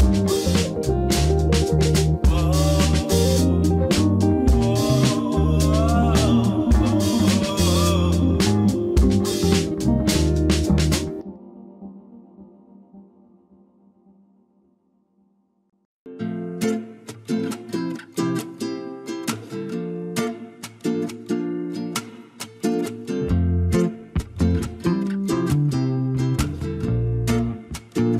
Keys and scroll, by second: 16.9 n, 23.3 r, 25.5 ctrl+s.